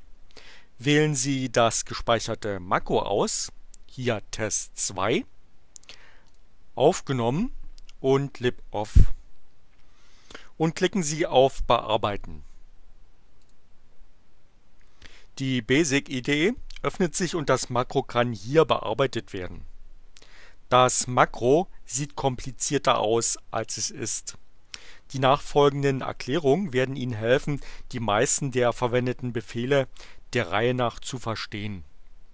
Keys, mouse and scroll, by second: 4.3 click, 6.0 click, 8.0 click, 13.4 click.